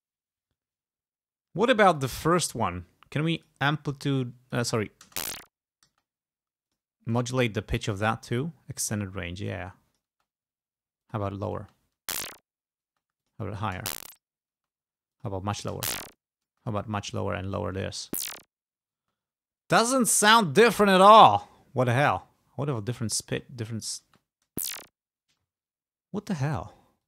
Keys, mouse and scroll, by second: 2.1 click, 3.5 click, 4.2 click, 5.1 space, 6.0 space, 6.9 click, 7.2 right click, 9.0 click, 9.6 click, 10.2 space, 11.1 click, 11.7 space, 13.0 space, 13.3 click, 13.9 space, 15.2 click, 15.8 space, 16.6 space, 17.1 click, 18.1 space, 19.2 space, 21.1-23.4 drag, 23.4 space, 24.1 space, 25.5 space.